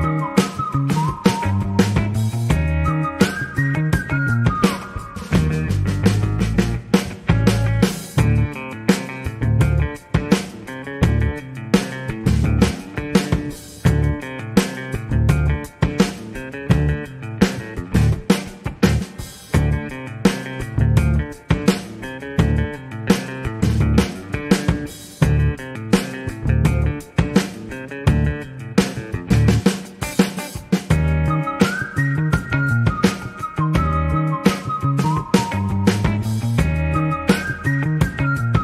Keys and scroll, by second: 32.4 a, 32.8 a, 36.8 g, 37.5 x.